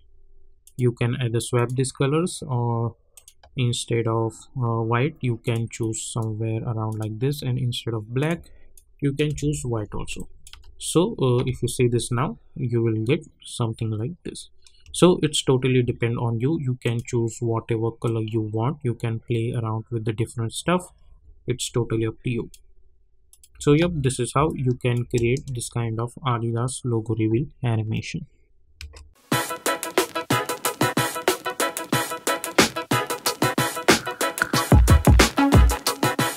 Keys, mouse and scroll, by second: 5.4-9.2 drag, 9.2 Return, 10.1 click, 10.5 space, 14.8 space, 16.8-23.3 drag, 23.5 space, 24.4 click, 25.0 space, 28.7 space.